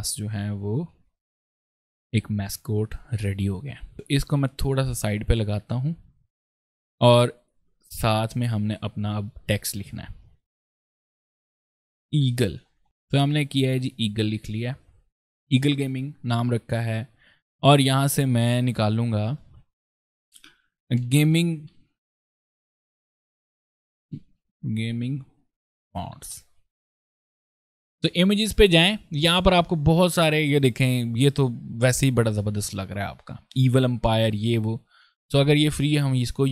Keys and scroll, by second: 0.7 ctrl+space, 3.9 ctrl+v, 7.6 ctrl+s, 11.4-12.7 typing, 20.6-22.3 typing.